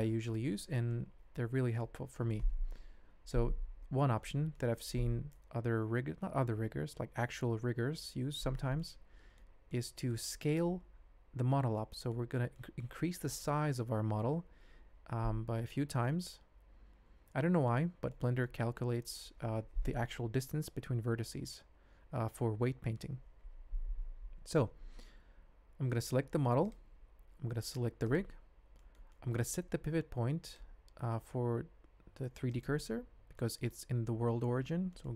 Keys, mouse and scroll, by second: 0.9 ctrl+click, 2.1 shift+click, 4.3 shift+middle drag, 4.5 shift+click, 8.8-9.4 ctrl+drag, 9.7-10.1 drag, 11.7 ctrl+middle click, 12.5 ctrl+middle click, 16.0-17.8 ctrl+middle drag, 18.1-18.4 shift+middle drag, 18.7 ctrl+middle click, 26.3 alt+a, 28.6-29.0 shift+middle drag, 29.1 middle click, 30.5-32.7 drag, 33.3 shift+middle drag, 34.9 shift+middle drag.